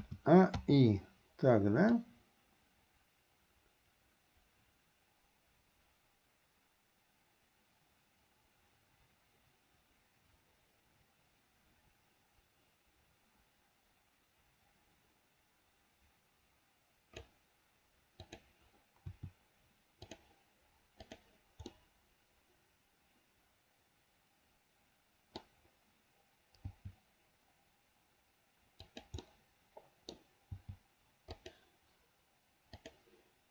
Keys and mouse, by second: 0.1 a, 0.8 i, 2.1-17.6 drag, 18.4 click, 19.2 r, 21.9-24.4 middle drag, 24.4-25.6 drag, 24.4-25.6 right drag, 29.4 click, 29.4 right click, 32.9 click.